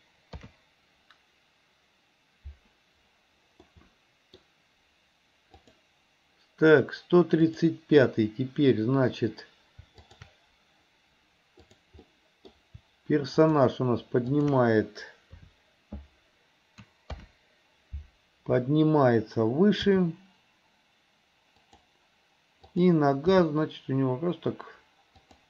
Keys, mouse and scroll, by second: 0.4 ctrl+KP_3, 3.8 middle click, 5.7 click, 7.5 click, 10.1 shift+click, 11.7 drag, 12.1-12.6 middle drag, 13.5 shift+click, 14.4 shift+click, 15.4 KP_3, 17.2 ctrl+KP_3, 19.9 g, 22.8 click, 23.4 g.